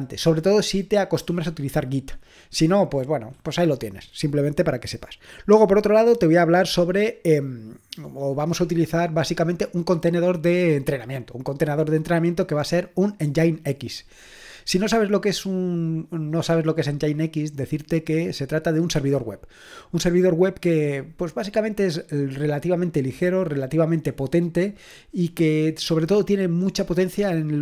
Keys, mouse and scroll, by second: 11.6-16.8 scroll down 1, 16.8-22.1 scroll down 1, 22.1-27.6 scroll down 1.